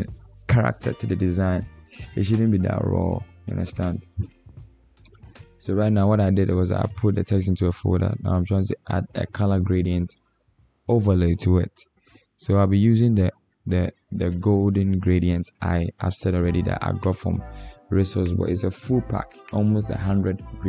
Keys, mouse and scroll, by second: 1.3 double click, 2.5 Caps_Lock.